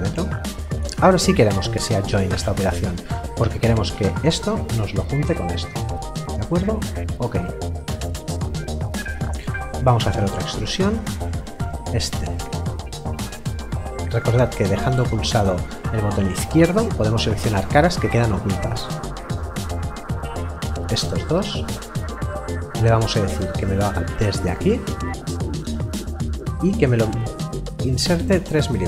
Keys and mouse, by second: 6.8 click, 9.7 e, 11.4 click, 13.0 click, 19.4 click, 22.6 click.